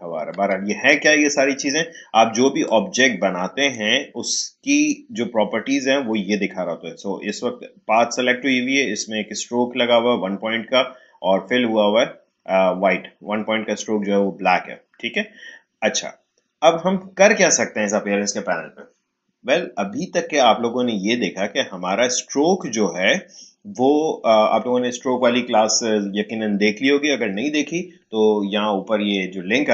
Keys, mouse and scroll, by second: 2.6-7.5 drag, 22.6 click.